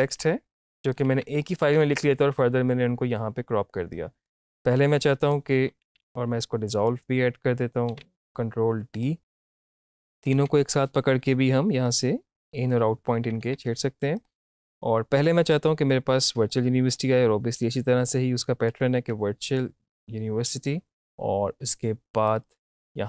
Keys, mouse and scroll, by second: 0.9 click, 1.1 shift+`, 1.5 click, 4.2 click, 4.9 click, 5.9 ctrl+z, 6.5-7.9 drag, 7.9 ctrl+d, 9.0-10.3 drag, 10.3 typing, 11.9 click, 13.2 typing, 14.2-19.1 drag, 19.1 space, 21.6 space, 22.3-23.0 drag.